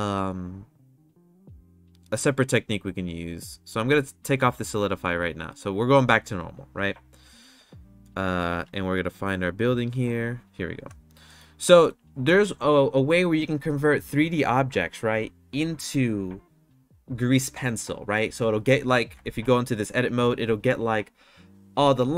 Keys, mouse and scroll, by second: 4.3-5.3 drag, 8.6 KP_Decimal, 9.8 click, 11.2 middle click, 11.5-11.8 shift+middle drag, 19.3 Tab.